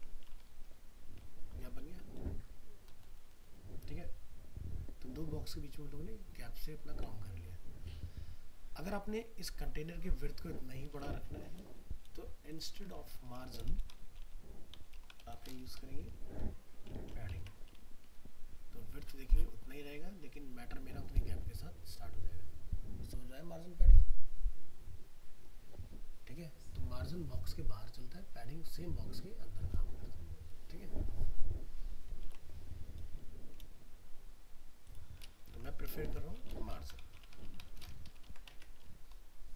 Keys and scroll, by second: 11.0 alt+Tab, 13.2 ctrl+shift+Left, 17.0 ctrl+s, 17.4 alt+Tab, 32.2 alt+Tab, 36.0 ctrl+shift+Left, 38.3 ctrl+s, 38.5 alt+Tab.